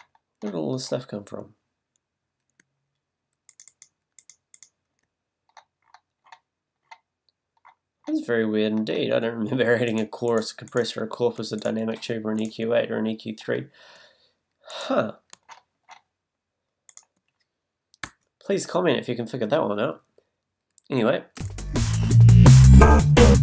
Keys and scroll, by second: 0.0 shift+super+z, 21.4 space.